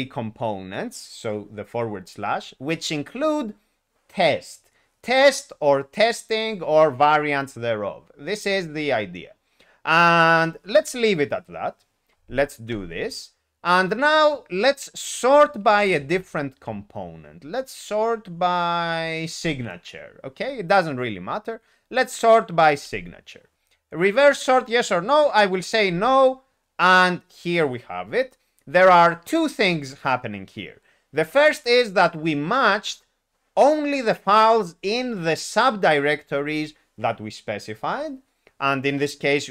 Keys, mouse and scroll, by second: 12.6 Return, 22.8 Return, 25.9 n.